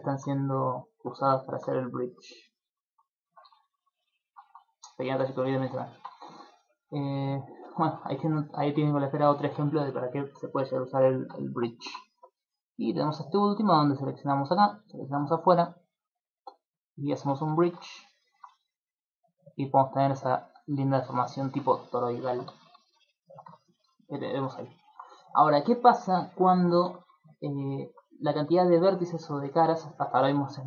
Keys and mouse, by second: 0.0 ctrl+middle click, 0.5 right click, 1.0 middle click, 1.2 Tab, 1.5 middle click, 2.8 ctrl+z, 3.4 ctrl+z, 3.6 ctrl+z, 3.8 ctrl+z, 4.0 ctrl+z, 4.1 ctrl+z, 4.4 ctrl+z, 4.7 ctrl+z, 4.9 ctrl+z, 5.1 ctrl+z, 5.5 shift+middle click, 5.9 ctrl+middle click, 6.2 shift+middle click, 6.7 ctrl+middle click, 7.2 middle click, 7.5 shift+middle click, 8.8 shift+middle click, 9.7 shift+middle click, 10.1 ctrl+middle click, 10.5 shift+middle click, 11.6 shift+middle click, 11.8 ctrl+middle click, 12.1 Tab, 12.3 right click, 12.7 Tab, 13.1 middle click, 14.0 alt+right click, 14.9 alt+shift+right click, 16.4 click, 17.5 ctrl+middle click, 18.2 shift+middle click, 18.9 click, 21.0 z, 21.3 middle click, 21.6 z, 22.1 middle click, 22.5 Tab, 22.9 middle click, 23.2 shift+middle click, 23.7 ctrl+middle click, 24.1 middle click, 24.5 shift+middle click, 24.8 middle click, 25.7 shift+middle click, 26.2 ctrl+middle click, 26.5 shift+middle click, 26.8 Tab, 27.5 alt+right click, 28.1 right click, 28.5 shift+right click, 28.8 alt+right click, 29.1 alt+right click, 29.4 middle click, 29.9 shift+middle click, 30.4 shift+right click.